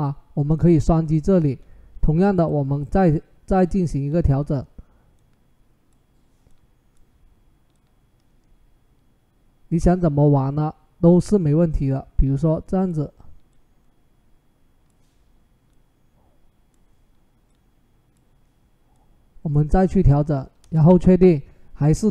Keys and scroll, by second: 20.4 Return.